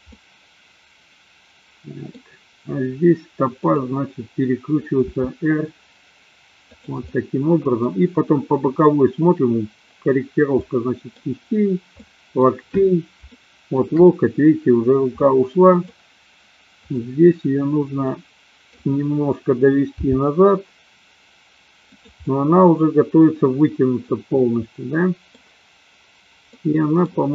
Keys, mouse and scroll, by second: 0.3-2.1 middle drag, 3.5 click, 5.0 r, 6.9 drag, 7.1-7.9 middle drag, 10.6 middle click, 12.0 middle click, 13.3-13.9 shift+middle drag, 15.3-16.0 middle drag, 16.8 click, 18.0 middle click, 20.1 g, 22.4-25.4 middle drag, 26.5 middle click.